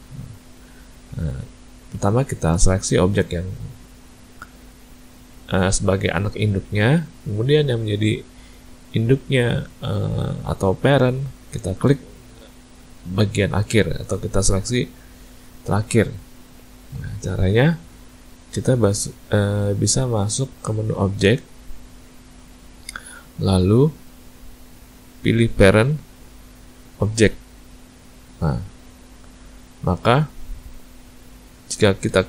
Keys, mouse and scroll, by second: 3.1 click, 4.7 shift+click, 6.0 shift+click, 13.2 shift+click, 21.7 click.